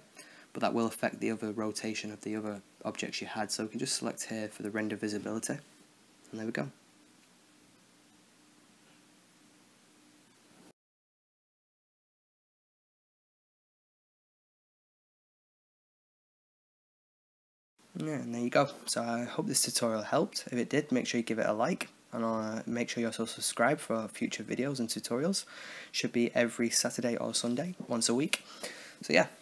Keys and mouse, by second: 0.5 click, 4.9 right click, 6.5-6.9 drag, 16.4-17.8 right drag, 17.8-19.4 drag, 22.1 click, 22.3 shift+a, 22.5-24.6 drag, 24.6 shift+a, 25.0 click, 25.9 click, 26.6 click, 27.2 shift+a, 27.5 shift+d, 27.7 shift+d, 28.0 click, 28.7 click, 29.1 click.